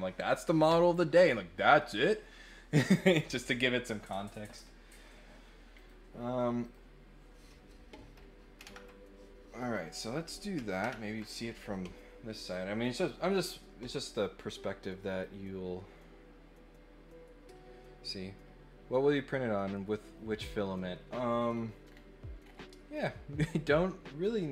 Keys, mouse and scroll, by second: 5.7 click, 6.6 click, 15.0 click, 21.3 scroll up 2, 21.8 scroll down 1, 22.4 scroll up 2.